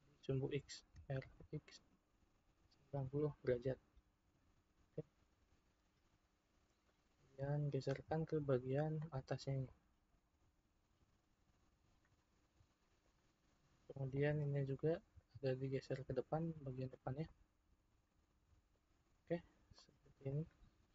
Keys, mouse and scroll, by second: 0.9 r, 6.9 click, 9.7 click, 12.7-14.0 shift+middle drag, 14.0 click, 15.1 click, 17.3-19.0 middle drag, 19.0-19.8 scroll down 5, 19.8-20.9 middle drag.